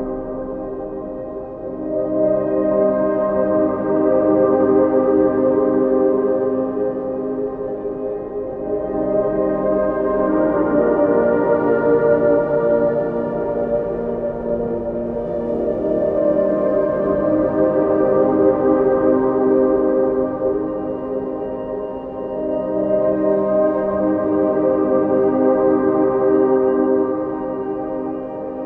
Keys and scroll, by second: 27.6 ctrl++.